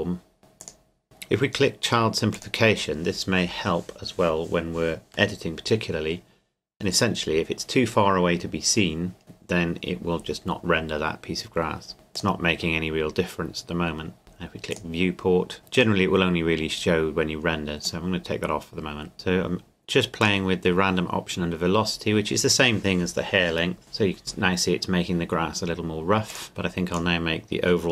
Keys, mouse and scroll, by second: 1.0-2.3 scroll up 2, 2.3-4.6 drag, 11.9 click, 15.6 KP_0, 15.7 click, 20.2 click, 26.3 click, 26.9 click.